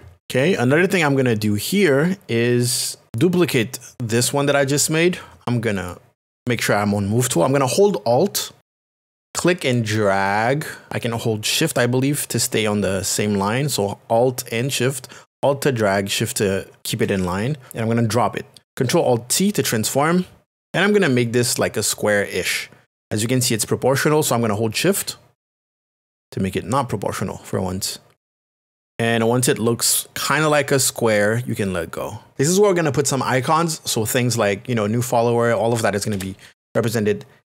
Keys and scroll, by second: 21.2 alt+t, 36.1 Return.